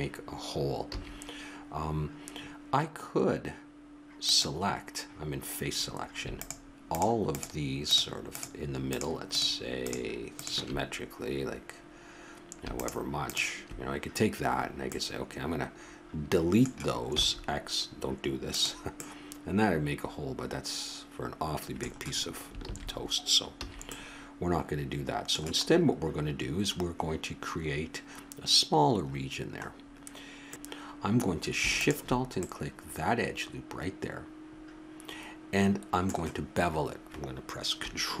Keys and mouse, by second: 0.9 a, 4.2-6.1 drag, 6.3-12.2 drag, 12.7-15.3 drag, 15.3-16.7 middle drag, 17.1 x, 22.6 ctrl+z, 23.6 a, 30.2-31.3 middle drag, 31.7-33.9 drag, 33.9 middle click, 34.4-38.2 middle drag.